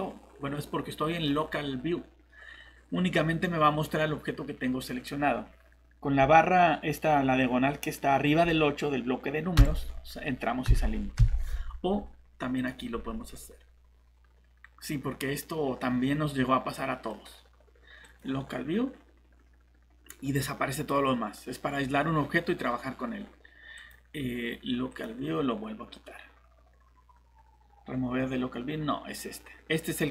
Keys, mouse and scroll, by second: 12.6 click.